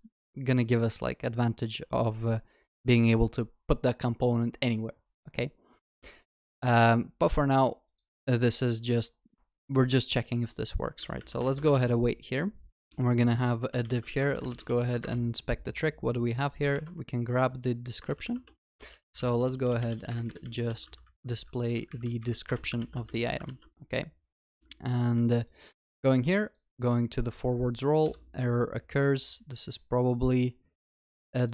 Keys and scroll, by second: 11.8 ctrl+s, 12.8 Tab, 15.0 ctrl+shift+n, 16.8 ctrl+Tab, 22.5 Return, 22.8 ctrl+s, 23.1 ctrl+alt+shift+l, 24.8 ctrl+s.